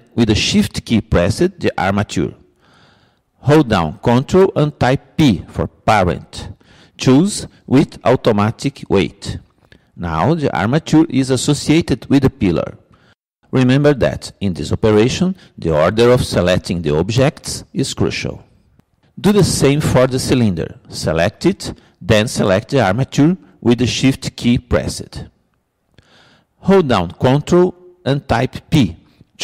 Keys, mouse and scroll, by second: 1.9-3.8 drag, 6.3 ctrl+p, 21.6-23.3 drag, 24.6-26.3 drag, 28.5 ctrl+p.